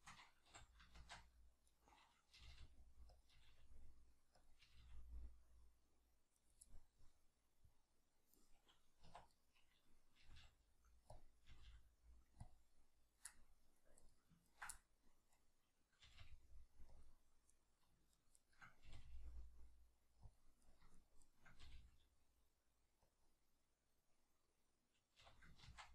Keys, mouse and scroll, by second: 0.5 g, 1.8 right click, 2.3 g, 3.2 click, 3.3 g, 4.5 click, 4.6 g, 6.5 right click, 6.7-9.3 middle drag, 9.1 1, 9.3 right click, 10.2 g, 11.2 click, 11.5 g, 12.5 click, 13.3 middle click, 14.0 right click, 14.5 ctrl+right click, 14.7-17.1 middle drag, 16.0 g, 17.1 click, 17.5 right click, 18.1 shift+right click, 18.3 shift+right click, 18.9 g, 20.3 click, 20.6 right click, 20.9 shift+right click, 21.2 shift+right click, 21.6 g, 23.1 click, 25.2 g.